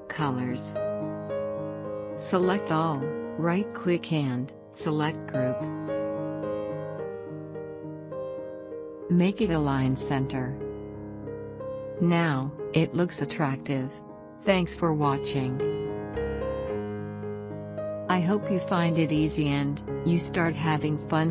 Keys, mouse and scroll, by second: 2.9 right click, 4.3 click, 9.5 click.